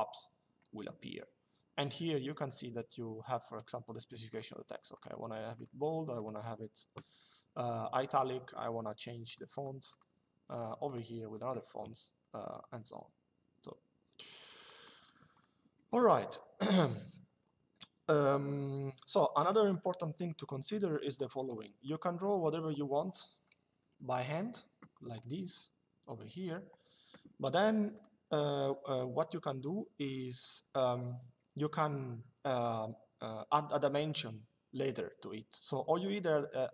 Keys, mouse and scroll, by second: 4.0 click, 7.8 click, 8.9 click, 14.3 click, 19.3 click, 21.5 click, 23.5 Escape, 26.1 click, 27.6 click.